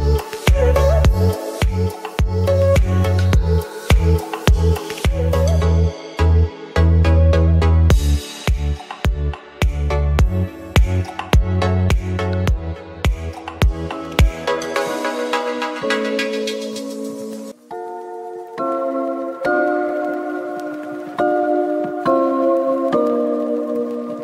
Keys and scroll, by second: 0.3 s, 8.7 ], 14.4 space, 15.6 space, 16.3 ], 16.9 space, 17.6 space, 18.6 space, 19.3 space, 21.1 space, 23.0 space.